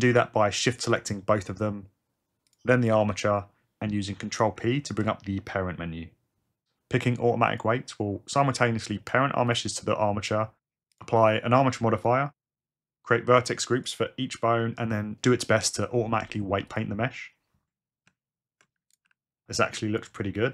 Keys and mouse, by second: 2.5 shift+click, 4.8 ctrl+p, 18.1 Tab, 19.0 r, 20.0 r.